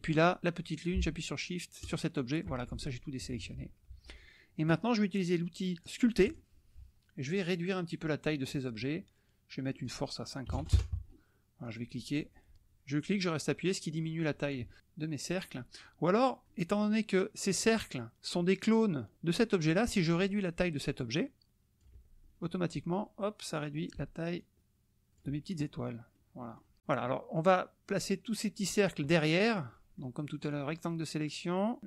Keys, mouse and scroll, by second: 1.9 shift+click, 3.2 KP_Subtract, 6.2 click, 8.3 click, 9.7 click, 10.5 KP_0, 10.7 KP_Enter, 11.6-14.7 drag, 16.4 click, 16.8 middle drag, 16.8 scroll up 2, 21.5 ctrl+shift+click, 24.4 ctrl+click, 26.2 middle click, 27.9 click, 29.7 middle click, 30.5-31.8 drag.